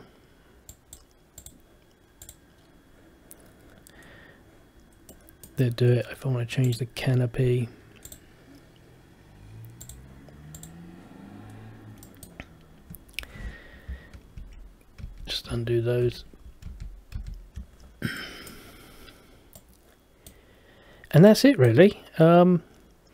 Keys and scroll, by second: 14.5 ctrl+z, 15.2 ctrl+z, 16.8 ctrl+z, 17.3 ctrl+z.